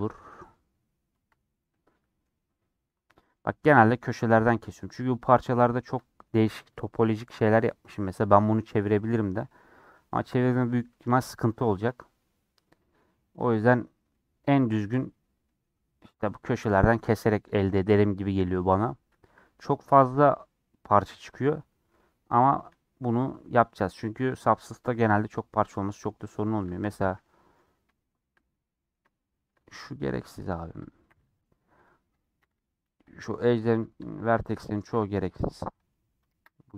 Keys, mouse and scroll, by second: 0.1 click, 1.6-3.5 middle drag, 3.5 scroll down 2, 3.6-4.9 middle drag, 4.9-5.9 scroll up 2, 5.9-11.0 middle drag, 11.0 a, 12.9-13.2 scroll down 1, 13.2 middle click, 13.6-14.0 scroll up 1, 14.0-15.1 middle drag, 15.1-15.4 scroll down 1, 15.4 middle click, 15.7-16.6 scroll up 1, 16.7 middle click, 17.5 click, 17.6-19.3 middle drag, 19.3 a, 22.0 middle click, 22.3 scroll up 1, 22.5 shift+middle click, 23.3-23.7 scroll down 3, 23.7-27.1 middle drag, 27.1 1, 27.1 middle click, 27.5 scroll down 1, 27.8 shift+middle click, 28.4-29.8 scroll up 1, 29.8-33.7 drag, 34.0 shift+middle click, 34.8 g, 35.8 middle click, 36.4 ctrl+z.